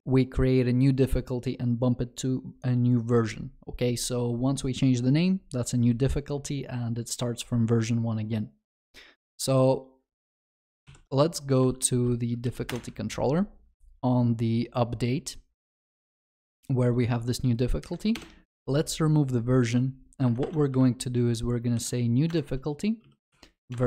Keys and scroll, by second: 10.9 ctrl+shift+n, 22.3 Return.